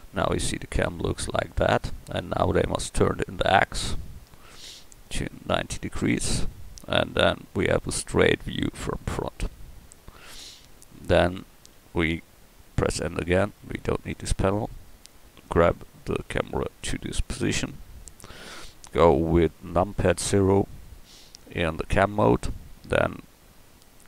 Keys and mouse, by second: 9.5 KP_1, 13.0 n, 15.6 g, 20.3 KP_0.